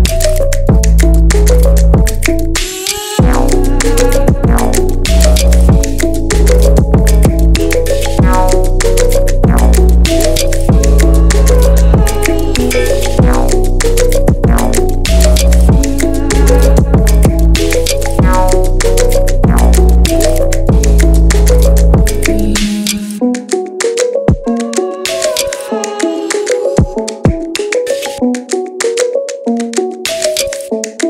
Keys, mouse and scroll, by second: 5.6-6.1 scroll up 1, 6.1-7.5 scroll down 7, 7.5-8.5 scroll up 2, 8.5-9.5 drag, 9.5 KP_1, 9.9-10.5 scroll down 2, 10.5-11.7 shift+middle drag, 11.7 click, 12.4-14.6 middle drag, 14.6 click, 15.2 middle click, 15.9-16.8 scroll down 2, 17.4 scroll up 1, 17.5 middle click, 18.3 KP_3, 19.5 KP_1, 20.2 alt+z, 20.9 click, 22.1 drag, 22.5-24.5 middle drag, 24.5 scroll up 1, 24.7-25.9 middle drag, 25.9-26.4 scroll up 2, 26.4 Tab, 26.7-28.0 middle drag, 28.0 click, 28.7 ctrl+shift+click, 29.9 click.